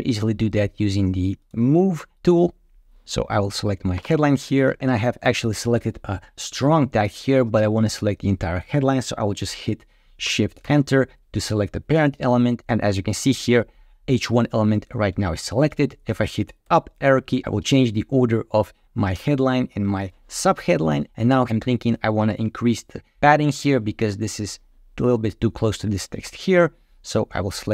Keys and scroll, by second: 10.5 shift+Return, 16.5 Up.